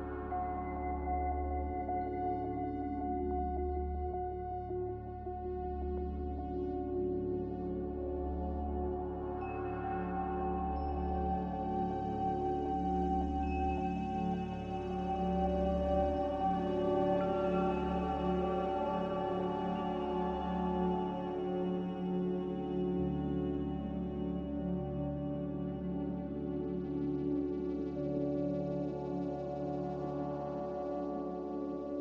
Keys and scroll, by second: 2.6 Return, 31.6 Delete.